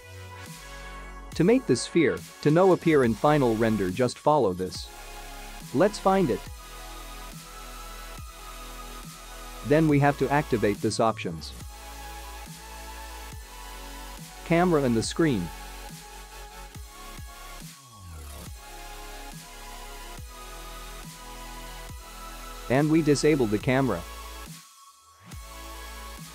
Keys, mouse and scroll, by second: 0.6 click, 1.7 middle click, 3.8 click, 5.7 click, 6.9 click, 7.5-9.1 scroll down 9, 10.1-11.7 scroll up 8, 12.3 click, 20.4-24.0 scroll down 9, 24.0 click.